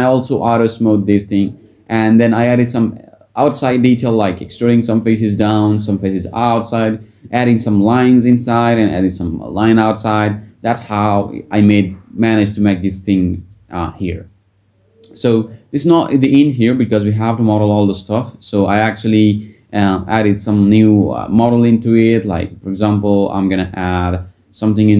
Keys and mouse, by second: 2.3 shift+click, 3.4 alt+e, 5.6 Tab, 10.2 Tab, 13.1 Tab, 16.9 click, 18.0-18.7 drag, 19.4 click, 20.3 middle click, 24.6 Tab.